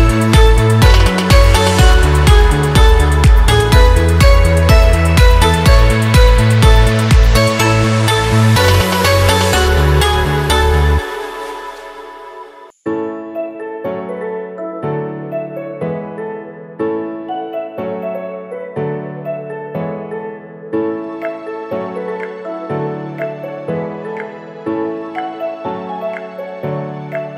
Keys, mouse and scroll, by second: 0.0-5.3 typing, 7.4 click, 10.8 click, 11.7 shift+click, 14.9-17.0 typing, 18.6 typing, 21.8 ctrl+t, 23.0-26.3 drag, 26.3 Return.